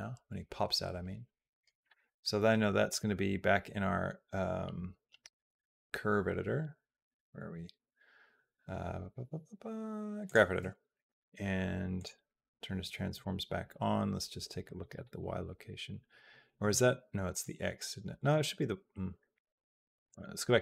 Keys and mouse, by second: 2.8-10.1 drag, 11.7 click, 12.9 click, 14.4 click, 17.1 click, 18.0 click, 19.9 click.